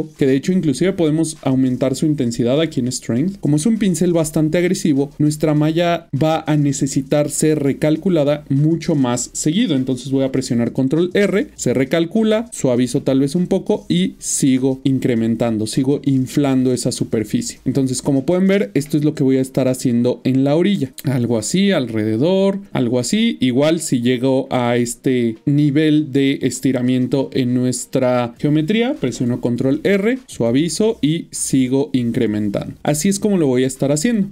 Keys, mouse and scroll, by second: 0.0 click, 0.1 double click, 0.9 middle click, 2.5 click, 4.3 middle click, 10.8 ctrl+r, 12.5 shift+click, 14.8 middle click, 16.1 shift+middle click, 17.6 double click, 17.8 middle click, 20.6 click, 21.2 double click, 21.7 middle click, 22.3 click, 22.6 double click, 30.2-34.3 shift+click, 30.8 click, 32.6 middle click, 32.9 click, 33.4 double click.